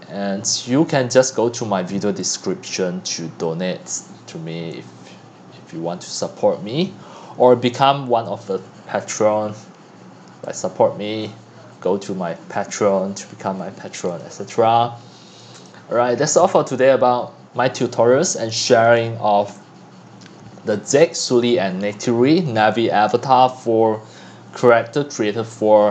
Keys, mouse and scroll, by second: 0.1-0.7 scroll down 2, 0.7-2.2 scroll down 1, 2.2 scroll down 1, 2.3-14.0 drag, 18.2-19.0 drag, 19.2-25.9 drag.